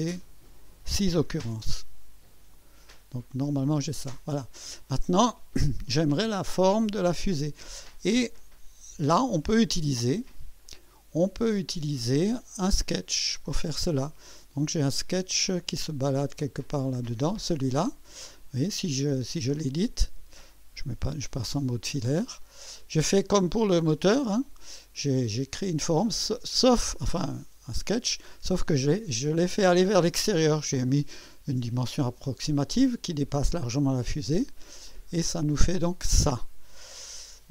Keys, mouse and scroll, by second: 0.2 click, 1.3 KP_6, 1.5-5.9 Return, 4.0-4.8 drag, 5.1 click, 5.9 middle click, 8.1-9.1 drag, 10.6-11.6 drag, 11.7 right click, 16.8 click, 19.6 click, 21.3 2, 21.9-22.2 scroll up 1, 22.4 right click, 23.5-24.7 right drag, 27.3 typing, 27.4-28.1 right drag, 28.3 typing, 34.9 click, 36.1-36.8 drag.